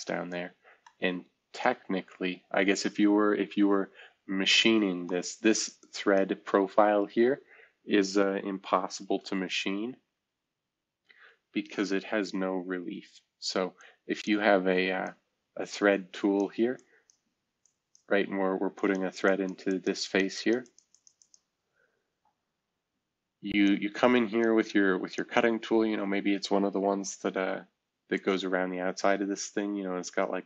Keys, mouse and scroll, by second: 0.0 F2, 0.4-1.4 scroll down 2, 1.9-3.4 scroll up 1, 3.5 F2, 5.0 click, 8.9 shift+F2, 9.7 scroll down 1, 10.3 scroll down 1, 10.7-11.4 scroll up 1, 11.9 F2.